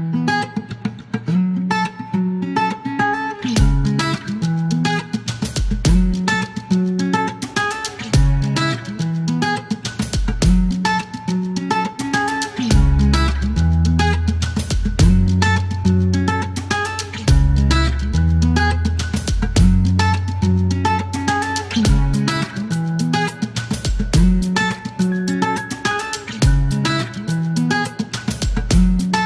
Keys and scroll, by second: 0.1 KP_5, 0.4 Return, 1.0 alt+q, 4.6 alt+k, 5.3 space.